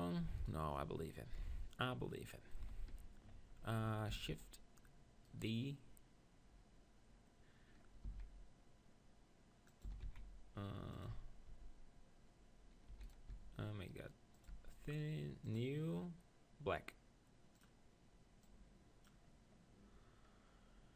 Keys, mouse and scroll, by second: 0.5-1.6 right drag, 1.4 KP_7, 2.6 z, 4.1 shift+d, 8.1 s, 9.8-12.8 drag, 9.8 s, 11.1 Tab, 11.5 Tab, 12.9 e, 13.4 s, 14.5-19.4 drag, 14.6 Tab.